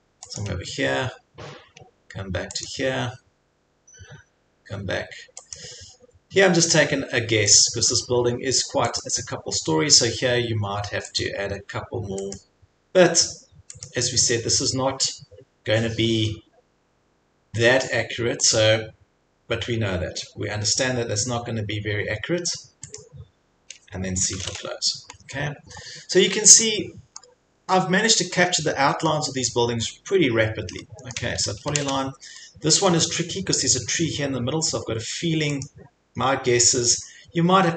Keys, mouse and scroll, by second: 0.4 click, 2.7 click, 7.6 click, 9.0 click, 11.3 click, 12.3 click, 13.9 click, 18.6 click, 23.0 click, 24.4 c, 25.1-25.4 scroll, 26.0-26.8 scroll up 3, 26.8 scroll, 27.2 middle click, 27.2 scroll up 3, 28.6 scroll, 31.1 click, 31.3-32.2 typing, 35.7 click.